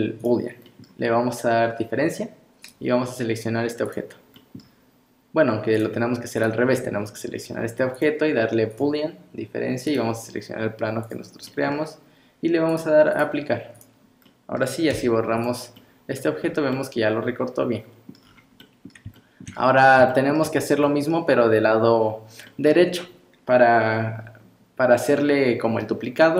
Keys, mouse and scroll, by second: 0.7 middle click, 2.7 click, 4.4 middle click, 6.4 click, 7.9 click, 9.9 click, 11.5 middle click, 12.7 click, 13.7 click, 14.3 middle click, 14.9 x, 15.8 middle click, 16.4 scroll up 2, 16.7 middle click, 18.2 scroll down 6, 18.6 middle click, 19.2 shift+middle click, 19.5 shift+scroll down 3, 20.1 shift+middle click, 20.5 scroll up 2, 20.9 middle click, 22.5 middle click, 23.0 scroll up 2.